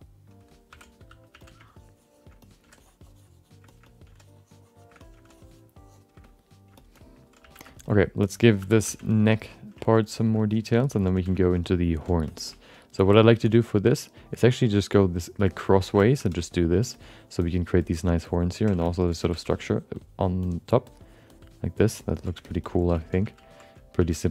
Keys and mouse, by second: 0.0 click, 0.7 alt+m, 1.3 f, 1.7 shift+click, 2.4 alt+middle click, 2.8 shift+click, 3.7 shift+middle click, 3.8 middle click, 4.2 shift+click, 5.0 alt+middle click, 5.3 shift+click, 6.2 alt+middle click, 6.7 alt+shift+middle click, 6.9 alt+middle click, 7.4 f, 7.7 shift+middle click, 7.8 alt+middle click, 8.6 2, 8.8 f, 9.1 alt+shift+middle click, 9.3 alt+middle click, 9.8 ctrl+alt+middle click, 10.2 shift+middle click, 10.4 alt+middle click, 10.7 ctrl+middle click, 11.1 f, 11.4 shift+middle click, 11.6 middle click, 12.3 alt+shift+middle click, 12.4 alt+middle click, 12.9 f, 13.6-14.7 ctrl+drag, 14.9 ctrl+click, 16.0 alt+shift+middle click, 16.4 ctrl+click, 17.0 click, 17.4 click, 17.9 ctrl+click, 18.6 click, 18.8 alt+shift+middle click, 19.2 f, 20.4 ctrl+click, 20.9 ctrl+click, 22.0 ctrl+click, 22.4 alt+shift+middle click, 22.6 alt+middle click, 23.0 ctrl+alt+middle click, 23.2 f, 24.0 shift+f.